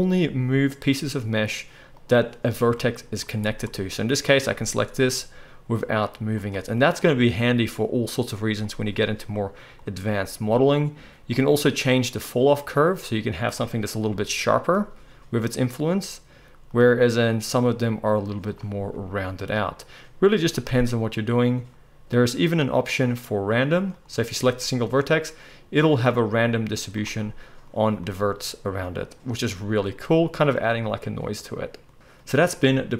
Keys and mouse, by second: 2.0-3.4 middle drag, 3.4 click, 3.5-11.4 middle drag, 4.4 g, 11.4-13.4 drag, 13.4-17.3 middle drag, 14.1 g, 17.3-20.6 drag, 18.9 g, 20.6-22.1 middle drag, 22.1-24.0 drag, 24.0-32.9 middle drag, 24.4 g.